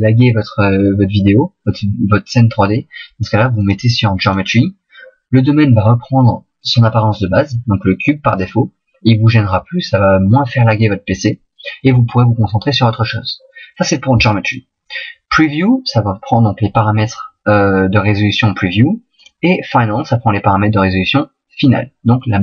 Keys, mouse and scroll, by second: 4.7 click.